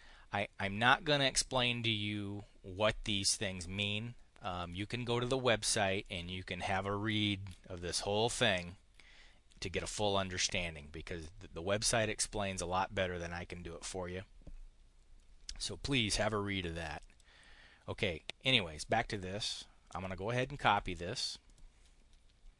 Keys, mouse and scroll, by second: 4.4 click, 5.9 click, 16.8 click, 18.8 click, 19.8 click, 21.3 click.